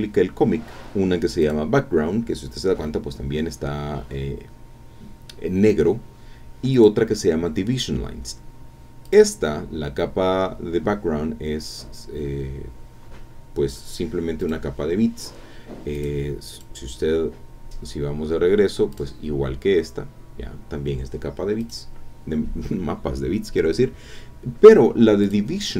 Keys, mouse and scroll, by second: 1.4 click, 6.7 click, 9.0 click, 14.4 click, 15.9 click, 16.5 click, 18.1-18.7 scroll down 4, 18.9 click, 21.6 click, 25.2 click.